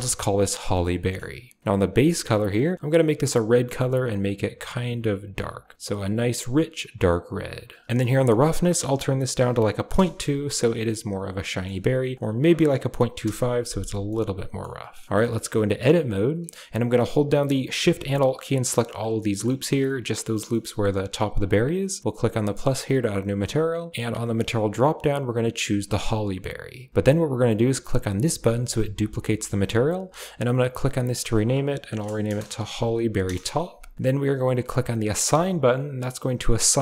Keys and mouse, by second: 0.7 middle click, 1.0 middle click, 1.8 click, 8.1-9.8 drag, 10.8 middle click, 12.1-13.1 drag, 14.1-14.6 middle drag, 15.0 shift+middle click, 15.3 click, 15.7 Tab, 18.2 alt+shift+click, 18.9 alt+shift+click, 19.3 alt+shift+click, 20.3 click, 22.5 click, 24.1-26.0 drag, 28.8 click, 29.9 click, 30.1-33.1 drag, 31.8 BackSpace, 35.2 click.